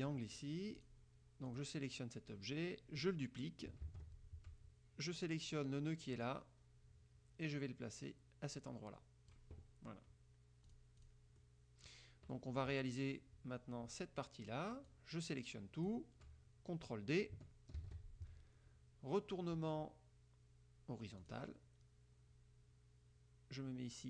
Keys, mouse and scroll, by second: 0.9 click, 1.7 click, 4.0 ctrl+d, 6.4-9.7 drag, 10.8 click, 11.1 click, 11.5 click, 12.5 click, 15.0-16.2 drag, 17.9 ctrl+d, 21.3 click.